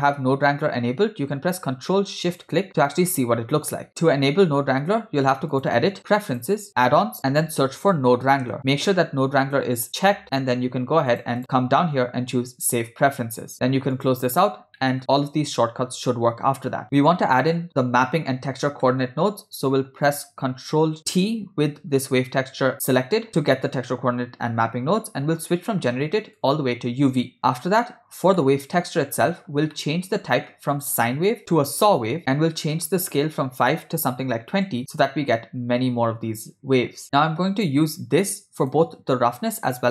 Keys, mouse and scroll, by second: 2.7 ctrl+shift+click, 5.5-6.7 drag, 14.8 middle click, 16.8 middle click, 18.9 middle click, 21.0 ctrl+t, 23.3 middle click, 26.4 click, 26.6 click, 27.5 middle click, 28.4 ctrl+middle click, 29.3 middle click, 29.8-30.2 ctrl+middle drag, 30.8-32.1 drag, 32.8-34.7 drag, 37.0 ctrl+middle click, 38.3-38.8 drag, 39.2 click.